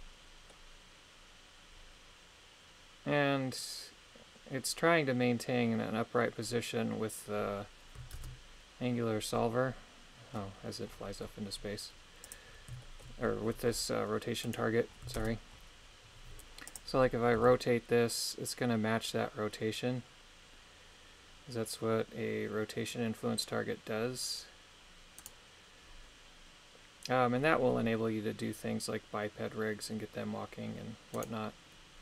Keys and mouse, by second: 8.2 shift+space, 12.2 click, 12.8 shift+middle click, 14.5 right click, 15.2 shift+space, 17.4 r, 25.2 right click, 31.2 right click.